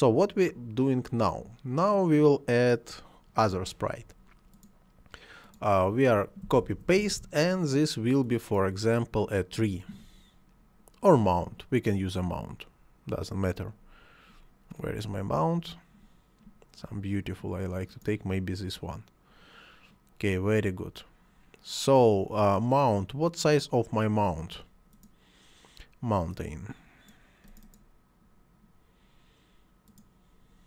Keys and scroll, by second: 6.5 ctrl+c, 6.7 ctrl+v.